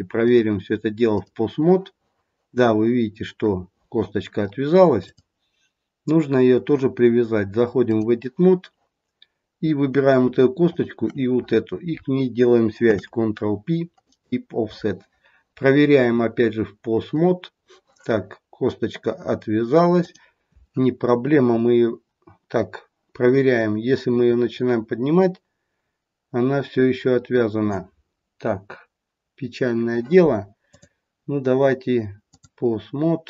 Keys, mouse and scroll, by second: 1.3 click, 5.0 click, 10.6 shift+click, 12.8 ctrl+p, 17.1 click, 19.9 click, 23.5 click, 30.6 click.